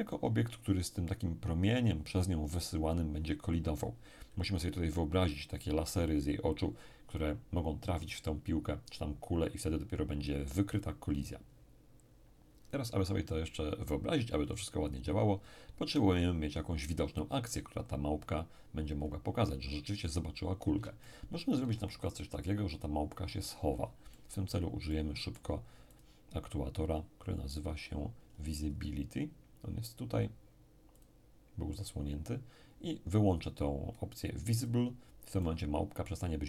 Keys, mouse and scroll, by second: 17.7-18.9 scroll down 1, 18.9-19.5 scroll up 2, 19.5-20.5 scroll down 2, 21.0-22.5 shift+middle drag, 24.1-26.9 middle drag, 25.9 click, 28.1-29.1 scroll up 1, 29.1-30.1 scroll down 1, 30.1 scroll down 1, 30.9 click, 34.6-36.4 drag, 35.4-36.4 middle drag.